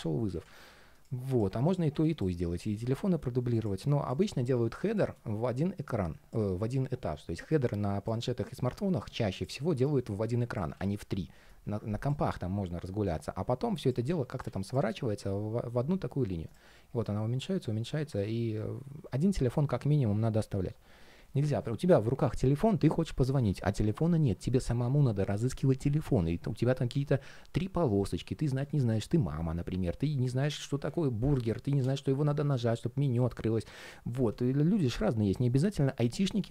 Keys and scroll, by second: 10.5 super+d.